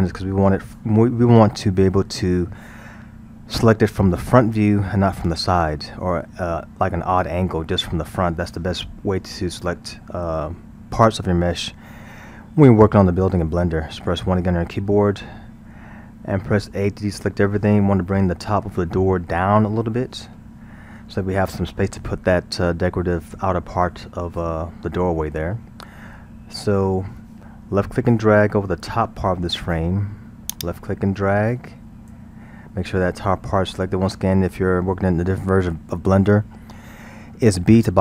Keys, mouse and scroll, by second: 6.5-9.5 middle drag, 14.1 KP_1, 16.6 a, 30.6 click.